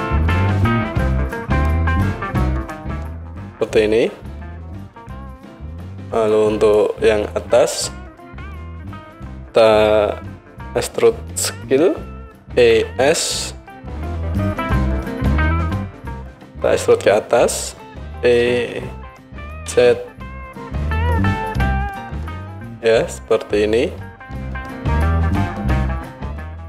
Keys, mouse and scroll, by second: 5.2-15.3 drag, 12.6 e, 15.3 middle click, 18.0 e, 25.0 middle click, 25.2 click, 25.3-26.6 middle drag.